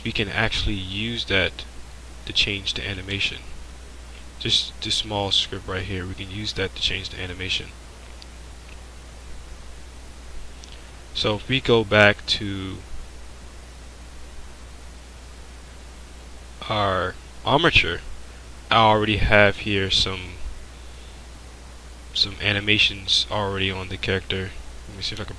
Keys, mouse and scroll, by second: 1.4 click, 1.5-5.0 drag, 6.2-10.3 drag, 25.0 click.